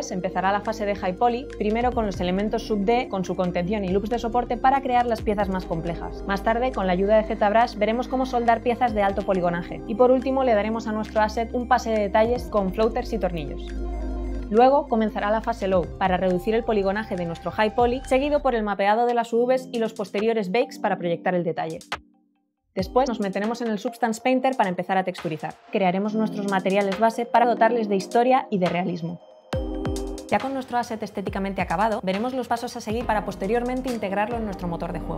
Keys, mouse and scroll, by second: 13.1 scroll up 1, 16.0 Num_Lock, 16.0 click, 16.2 middle click, 16.4 click, 16.8 click, 17.2 space, 17.6 alt+middle click, 18.2 space.